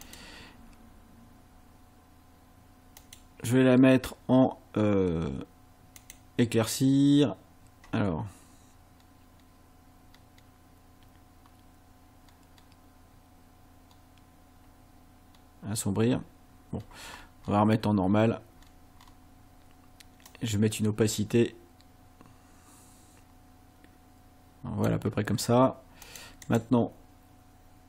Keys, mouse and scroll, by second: 0.1 click, 3.0 click, 6.0 click, 8.2 scroll down 1, 9.0-9.5 scroll down 2, 10.1-10.5 scroll down 2, 11.3 scroll up 2, 12.3-12.8 scroll down 4, 13.9 scroll down 2, 14.5 scroll up 2, 15.3 scroll down 2, 16.7-17.7 scroll up 6, 18.1-18.4 scroll up 1, 18.6-19.3 scroll up 4, 20.3-25.0 drag, 26.1 click, 26.5 right click.